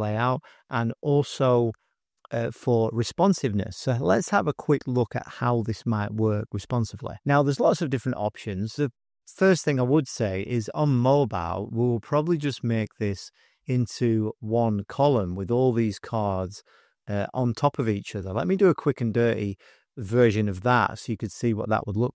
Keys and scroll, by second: 7.3 super+-, 8.0 space, 8.5 space, 8.5 space, 10.5 §, 11.4 space, 13.9 space, 16.4 space.